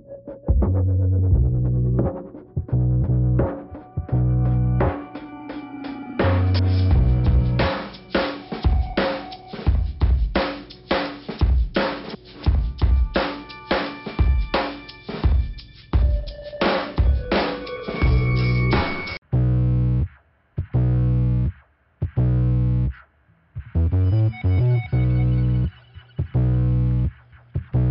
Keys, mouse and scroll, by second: 3.4 middle click, 4.3-4.7 scroll up 1, 4.7 click, 5.4 click, 6.5 click, 7.2 click, 8.1 click, 9.8 click, 11.3 click, 11.5 click, 12.0 click, 14.9 click, 16.6 click, 17.3 click, 18.5 click, 19.9 click, 22.0 click, 22.9 click, 23.9 click, 24.8 click, 25.7 click, 26.2 click, 27.0 click.